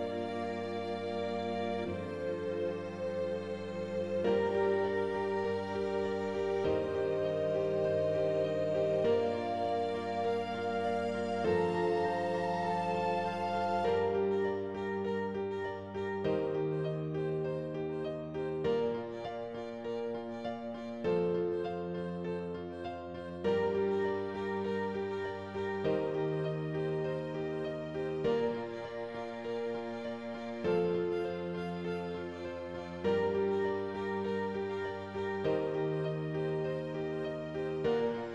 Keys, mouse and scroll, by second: 6.8 click, 13.1 click, 13.6 scroll down 3, 13.9 middle click, 14.4-14.8 scroll up 5, 14.8-16.6 middle drag, 16.6 click, 17.3-24.3 drag, 24.3 middle click, 25.0 scroll up 1, 25.2 middle click, 26.1 Tab, 26.5 Tab, 27.0 g, 29.7-31.0 drag, 31.0-32.9 middle drag, 34.1-35.4 drag, 36.1-38.3 drag.